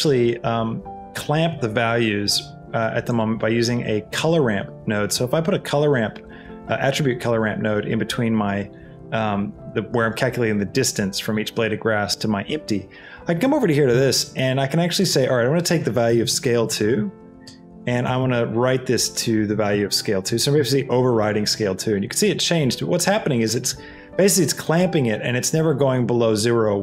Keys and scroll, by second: 1.1 shift+a, 16.1 a, 16.5 l, 16.9 2, 17.7 Tab, 18.1 s, 18.5 c, 19.6 a, 19.9 e, 20.3 2, 20.7 Return.